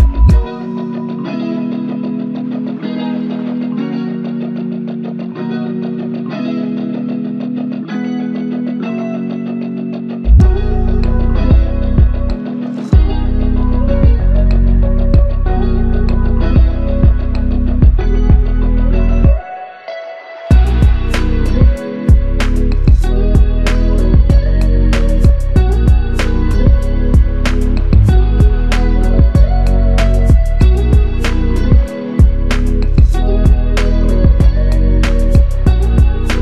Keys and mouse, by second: 5.0 alt+click, 23.3 alt+click, 26.5 ctrl+alt+click, 27.3 ctrl+alt+click, 27.6 alt+click, 34.5 ctrl+z.